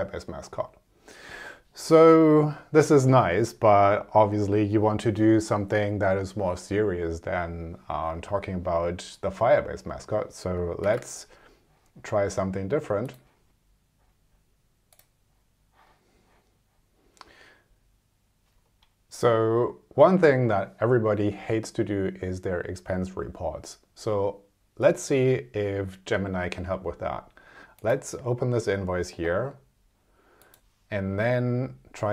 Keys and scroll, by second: 10.8 super+r.